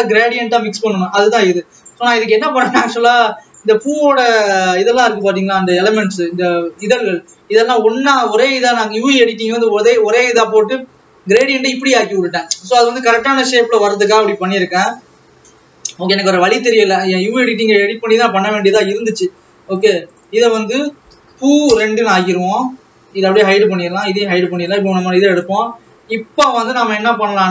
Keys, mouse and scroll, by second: 2.1-5.5 drag, 5.5 alt+a, 17.5-19.9 drag, 20.3-21.7 drag, 21.7 o, 23.6-25.8 drag, 26.2-27.5 scroll down 16.